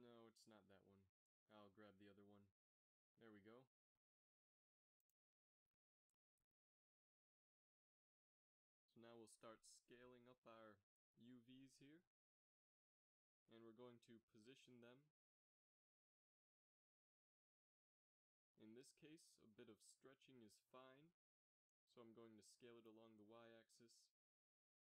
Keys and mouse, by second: 0.7-2.2 middle drag, 3.1 click, 4.5-6.3 drag, 6.4 s, 9.0 g, 10.6 s, 12.6 g, 17.5 s, 20.4 shift+z, 21.5 z, 21.7 z.